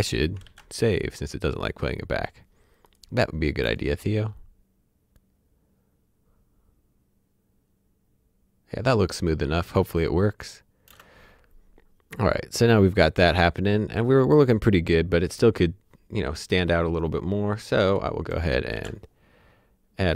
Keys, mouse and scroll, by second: 0.4 ctrl+s, 2.8 click, 3.6 space, 12.0 space, 12.9 click, 17.6 click, 18.7 s.